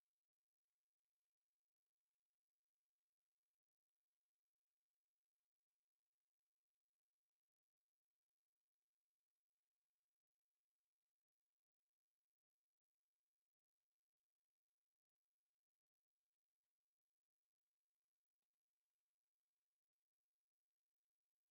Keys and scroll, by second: 0.0-3.5 typing, 0.8 Return, 1.0 Escape, 1.9 Return, 3.0 Escape, 4.2 Escape, 6.7-9.4 typing, 7.3 Return, 8.8 Escape, 9.9 F8, 12.0 Escape, 17.0 p, 17.2 space.